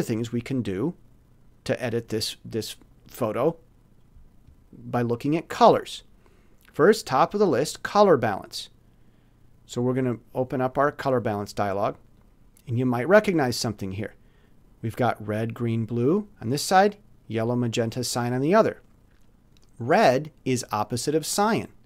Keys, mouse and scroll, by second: 5.3 click, 9.8 click, 12.1 click.